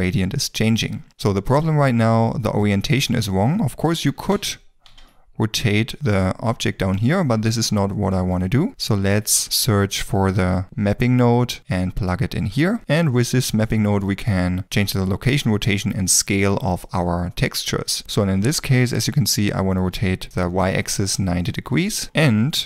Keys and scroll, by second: 4.2 r, 4.4 x, 5.0 y, 10.6 p, 20.3 KP_9, 20.6 KP_0, 20.8 Return.